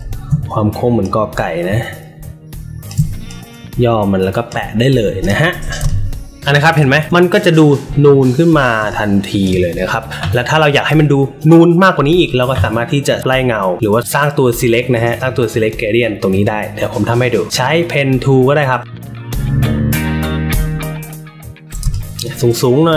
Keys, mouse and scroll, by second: 0.9-2.8 alt+shift+drag, 3.2 click, 5.1 click, 5.8 space, 5.8 click, 8.7 space, 8.8 click, 14.0 alt+middle click, 18.5 alt+middle click, 18.9 click, 19.3 click, 19.4 ctrl+z, 19.7 shift+click, 20.6 click, 21.7 space.